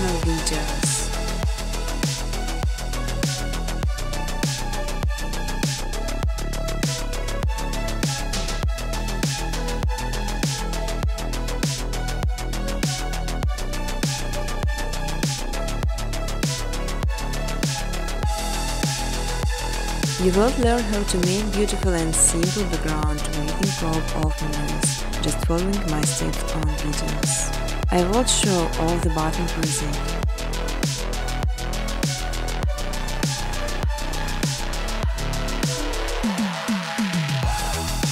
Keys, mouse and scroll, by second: 1.4-1.7 scroll down 4, 1.7-3.2 scroll, 4.5 scroll down 5, 4.9 click, 5.9 click, 5.9-6.8 scroll, 7.9 click, 8.5 click, 10.9 click, 12.8 click, 15.5 click, 16.4-18.3 typing, 20.2 Tab, 20.3 Tab, 21.1-21.9 typing, 22.8 Tab, 22.9-23.6 typing, 25.1-25.9 typing, 27.0 click, 27.3 click, 28.0 click, 28.4 click, 28.7 click, 29.5 click, 30.5 click, 31.0-33.4 scroll, 33.4 click, 35.6 scroll, 36.8 click.